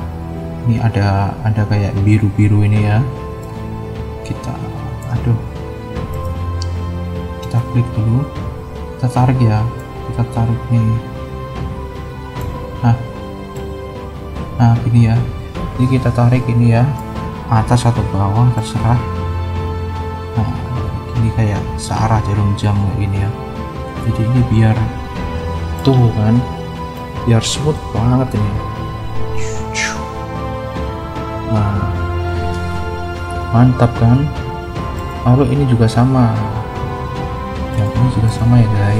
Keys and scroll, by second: 28.2 space, 31.4 space, 33.4 -, 35.5 =.